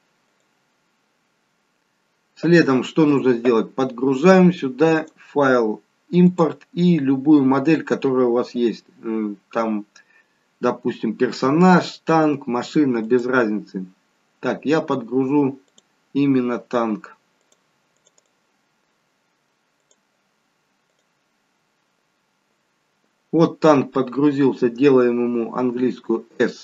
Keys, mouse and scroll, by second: 4.9 click, 25.7 s.